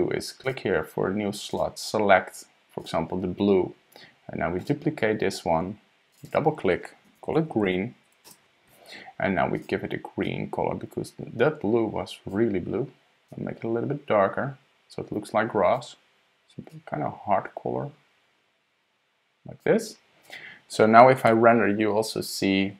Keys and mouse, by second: 0.4 click, 1.5-2.9 drag, 4.6 click, 6.1 click, 6.2 click, 7.7 e, 9.5 click, 20.2 click, 21.3 F12.